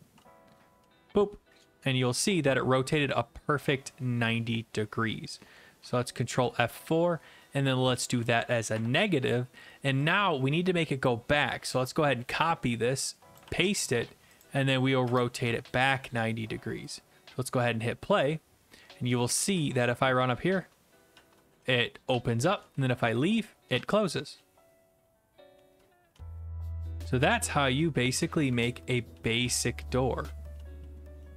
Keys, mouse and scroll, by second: 0.0-5.5 typing, 5.8 alt+F4, 8.0 click, 11.0 click, 11.7 ctrl+c, 13.3 click, 14.4 ctrl+v, 14.4 click, 15.1 BackSpace, 15.4 ctrl+s, 16.9 click, 17.5 click, 19.1-20.0 typing, 22.7 s, 23.7-31.3 typing.